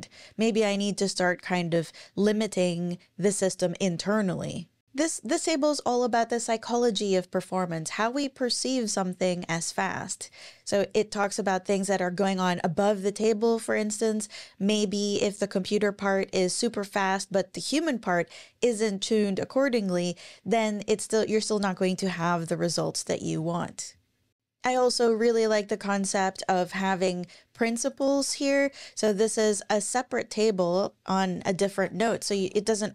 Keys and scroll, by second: 28.1 super+e, 31.8 super+o, 31.8-32.9 typing.